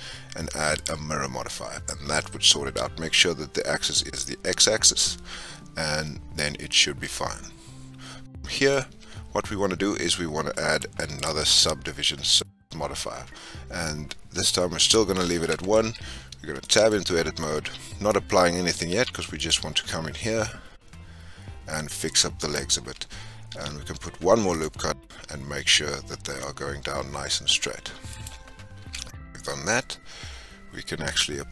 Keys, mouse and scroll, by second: 0.8-2.2 drag, 6.7-7.0 scroll down 3, 7.0-8.9 middle drag, 8.9 Tab, 10.7-11.1 drag, 12.3-14.1 drag, 14.8 scroll up 2, 15.4-15.8 middle drag, 15.8 Tab, 16.6 shift+middle click, 17.1-17.4 scroll up 1, 18.8 ctrl+r, 23.5 ctrl+r, 28.8 Tab, 29.2 scroll down 3, 29.4-31.5 middle drag.